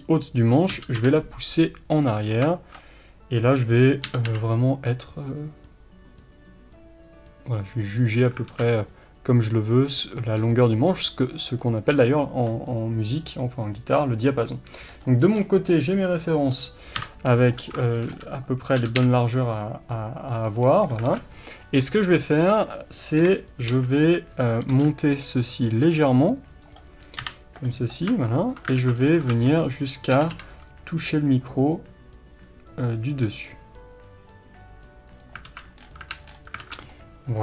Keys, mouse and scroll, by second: 0.7 g, 2.2-2.7 scroll down 1, 4.1 g, 8.5 alt+a, 8.5 scroll down 1, 8.7-13.4 middle drag, 10.3-10.7 scroll up 1, 14.2-16.9 middle drag, 16.9 KP_7, 17.6 scroll down 1, 17.8-21.0 shift+middle drag, 18.3 b, 21.0 alt+a, 21.4-23.1 scroll up 1, 23.1 KP_3, 23.7 a, 24.0-24.7 scroll up 1, 24.7 g, 26.6 click, 27.2 KP_7, 28.0 scroll down 1, 28.3-35.4 shift+middle drag, 28.7 alt+a, 28.9-29.3 scroll up 1, 29.7 b, 35.4 alt+a, 35.8-36.6 scroll down 2, 36.0 Tab, 36.6 alt+a, 36.9-37.4 middle drag.